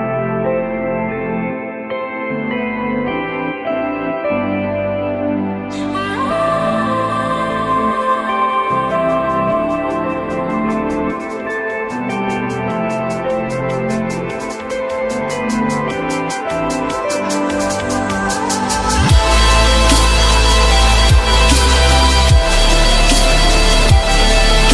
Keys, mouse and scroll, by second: 3.7 alt+middle click, 8.3 alt+middle click, 11.5 alt+middle click, 12.6 alt+middle click, 13.3 alt+middle click, 15.4 alt+middle click, 15.8 alt+middle click, 15.8 alt+middle click, 18.5 F4, 19.1 F4, 21.2 s.